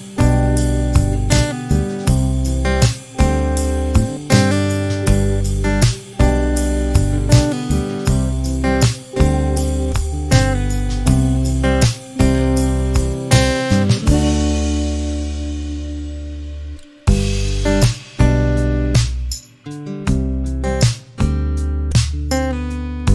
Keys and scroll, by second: 0.3 m, 6.6 1, 7.0 KP_Decimal, 7.2 5, 7.6 Return, 8.1 space, 9.3 t, 10.9 2, 11.6 Return, 12.1 space, 15.4 p, 20.9 e.